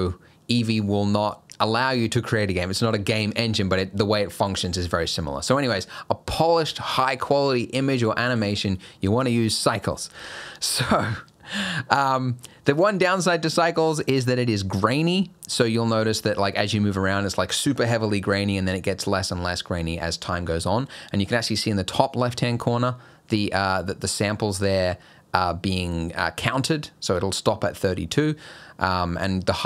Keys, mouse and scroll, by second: 13.0 shift+middle click, 13.4 scroll up 1, 16.1 scroll down 2, 16.7 scroll up 2, 17.1 scroll down 1, 20.7 scroll down 1, 21.1 scroll up 1, 24.2 scroll down 1, 24.5 scroll up 1, 28.0 scroll up 1, 28.8 scroll down 1.